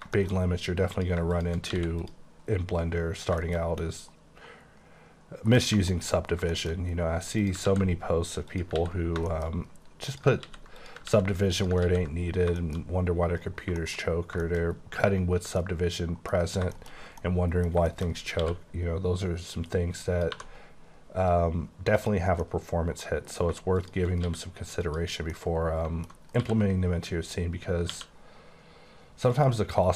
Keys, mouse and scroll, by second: 0.1 shift+middle click, 0.4 scroll up 6, 0.9 click, 1.7 x, 2.0 click, 2.3-2.8 scroll down 9, 2.8-3.2 scroll up 3, 3.4 shift+middle click, 3.7 scroll up 1, 3.8 middle click, 5.6-5.9 scroll down 4, 5.9 shift+middle click, 6.1-6.9 shift+scroll up 6, 6.5 shift+middle click, 7.4 click, 7.7 ctrl+x, 7.9-8.6 ctrl+scroll up 5, 8.6 click, 8.8 ctrl+x, 9.0 scroll down 7, 9.5 scroll up 5, 10.1 click, 10.5 x, 10.8 click, 11.0 x, 11.5 click, 11.8 x, 12.2 scroll down 6, 12.6 shift+middle click, 12.9 scroll up 1, 13.1-14.0 scroll down 10, 13.8 shift+middle click, 14.0-14.8 scroll up 8, 14.4 shift+middle click, 15.0-15.3 scroll down 7, 15.3 Tab, 15.6 middle click, 16.3-17.0 scroll down 6, 16.7 shift+middle click, 17.2 middle click, 17.6 scroll down 2, 17.9 shift+middle click, 18.4 q, 20.0 click, 20.3 2, 22.0 click, 22.4 scroll down 1, 22.4 middle click, 23.4-23.8 scroll down 2, 23.9 shift+click, 24.2 q, 24.8 click, 25.2 scroll down 1, 25.3 middle click, 26.2 alt+scroll up 2, 26.4 q, 27.9 q, 29.3 click, 29.8 click.